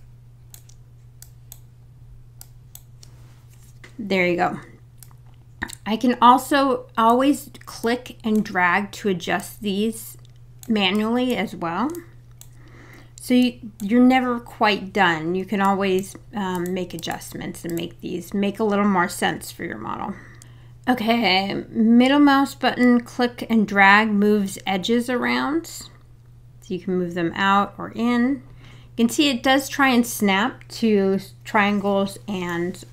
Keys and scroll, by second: 19.3 super+z.